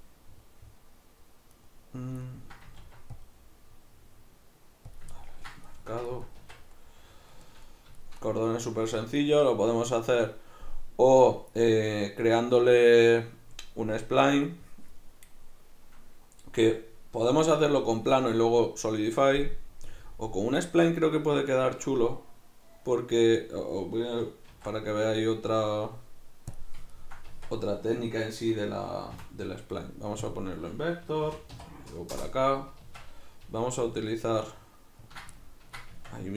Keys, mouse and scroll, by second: 1.6 right click, 2.2 ctrl+middle click, 2.8 ctrl+r, 5.0 click, 5.2-6.4 ctrl+middle drag, 6.4 Tab, 6.8-35.2 middle drag, 24.5 shift+a, 27.3 Tab, 29.1 v, 32.9 Tab, 33.4 g, 35.2 ctrl+click, 35.4-36.3 ctrl+middle drag, 36.0 Tab.